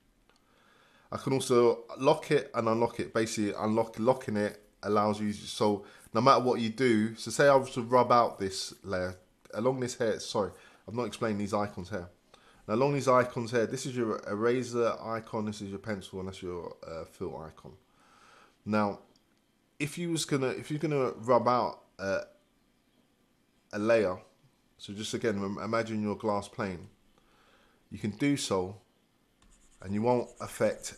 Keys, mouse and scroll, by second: 0.0 click, 4.6-30.9 drag.